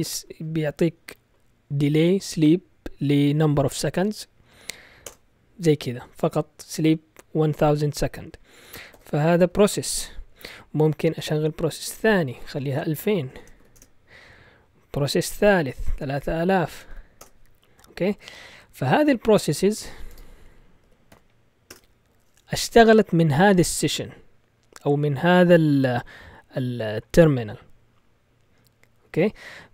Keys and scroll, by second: 5.0 Return, 8.9 ctrl+z, 10.3 Up, 11.1 space, 11.8 shift+7, 12.4 Left, 12.5 Left, 12.7 Left, 12.8 Left, 12.9 Left, 13.3 Left, 13.3 BackSpace, 13.6 2, 13.7 Return, 14.9 Up, 15.6 Left, 15.8 Left, 15.9 Left, 16.1 Left, 16.2 Left, 16.7 BackSpace, 16.9 BackSpace, 17.2 Return, 19.2-21.1 typing, 21.6 Return.